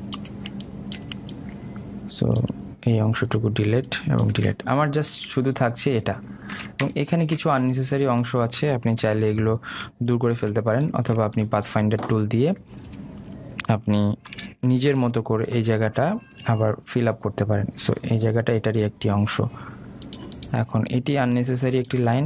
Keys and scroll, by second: 10.1 Delete, 11.4 ctrl+z.